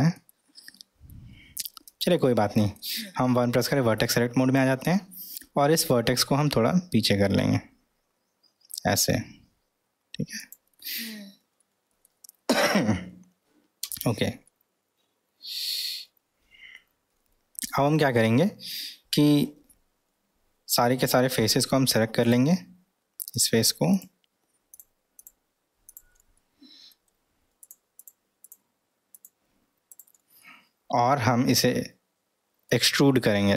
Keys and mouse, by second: 2.1-2.7 middle drag, 3.4 1, 4.0-4.6 drag, 5.0-6.0 middle drag, 11.6-12.0 middle drag, 13.9 Tab, 14.5-15.8 middle drag, 17.7-18.2 middle drag, 19.6 3, 21.1 middle click, 22.2 click, 23.3 click, 23.9 drag, 24.7 click, 25.2 click, 25.8 click, 26.4 middle click, 27.6 click, 28.4 click, 30.4-32.8 middle drag.